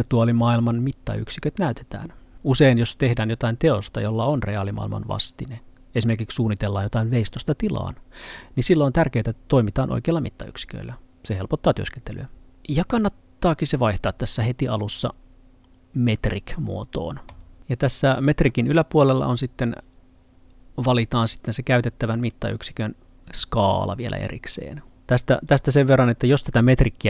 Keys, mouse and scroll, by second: 17.3 click, 22.6 click, 25.5 click.